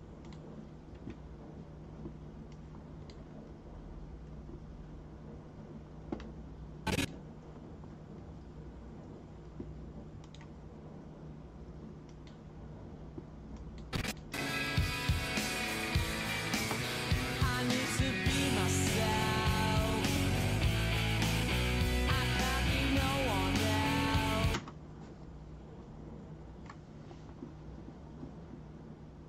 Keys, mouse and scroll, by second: 0.2 click, 2.5 click, 6.8 click, 10.2 right click, 12.0 click, 13.5 click, 13.9 click, 14.3 space, 24.5 space.